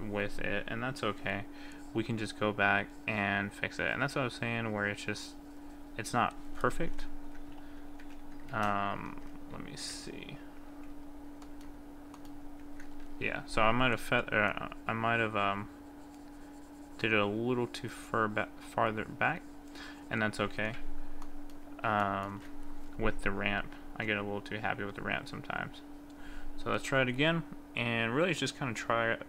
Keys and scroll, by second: 8.0 ctrl+z, 8.5 ctrl+z, 9.2 ctrl+z, 10.8 ctrl+y.